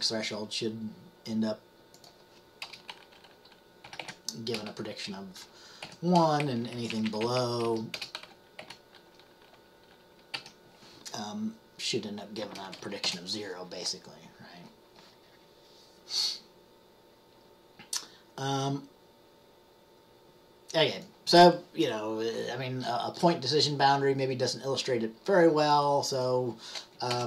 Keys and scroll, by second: 3.7-4.6 typing, 5.9 typing, 6.5 Right, 6.7 Right, 6.9 Right, 7.0 Right, 7.2 Right, 7.3 Right, 7.8 Right, 7.8-8.7 typing, 10.4 typing, 13.0-13.8 typing.